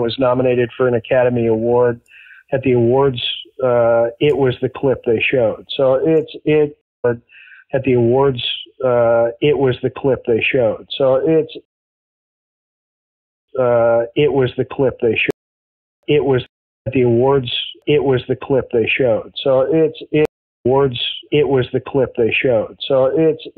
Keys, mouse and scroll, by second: 4.5 click, 5.1 click, 6.7 space, 6.8 click, 6.9 space, 7.6-9.7 drag, 10.8 click, 11.5 space, 12.4 click, 13.0 click, 13.4 space, 13.6-15.2 drag, 15.2 space, 15.7 ctrl+shift+Delete, 15.9 space, 16.4 space, 16.7 click, 16.7 space, 18.5 click, 19.4 click, 20.2 space, 20.5 click, 20.6 space, 21.9 ctrl+s.